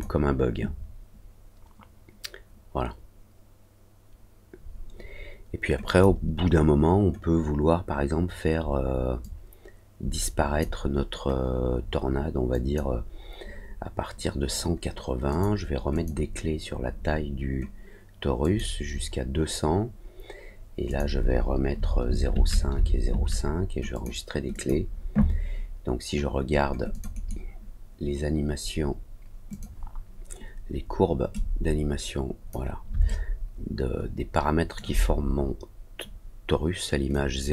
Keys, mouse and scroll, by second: 5.8 click, 9.1-10.5 drag, 12.4 click, 15.2 click, 15.9 click, 18.3 click, 20.8 click, 23.9 click, 24.5 click, 26.8 click, 27.1 right click, 29.4 click, 31.3-32.4 drag, 33.0-34.7 alt+middle drag, 37.0 click.